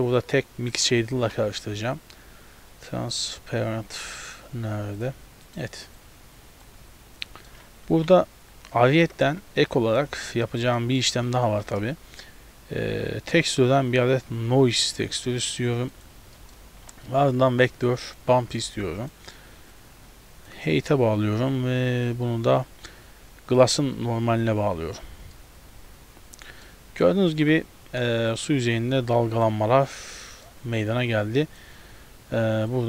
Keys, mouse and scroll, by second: 0.2 click, 1.2 shift+a, 6.0 click, 7.3 middle click, 7.9 shift+a, 9.3 z, 9.7 middle click, 10.3 scroll up 2, 10.5 shift+middle click, 10.8 middle click, 11.7 shift+a, 16.4 middle click, 16.8 shift+a, 19.8 click, 21.6 click, 25.4 middle click, 27.5-28.0 scroll up 1, 28.4 click, 28.4 scroll up 1, 30.3 middle click, 30.9 click, 32.7 click.